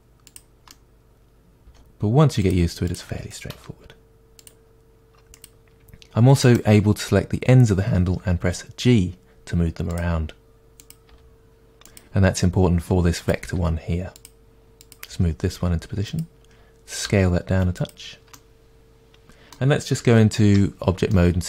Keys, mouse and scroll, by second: 0.4 click, 0.7 middle click, 1.6 click, 1.7 g, 2.5 click, 3.6 r, 4.5 click, 6.0 g, 6.5 right click, 8.1 g, 10.0 click, 11.2 g, 12.0 click, 13.5 g, 14.2 click, 15.2 g, 17.1 s, 18.4-21.2 middle drag, 20.5 Tab, 21.3-21.4 middle drag.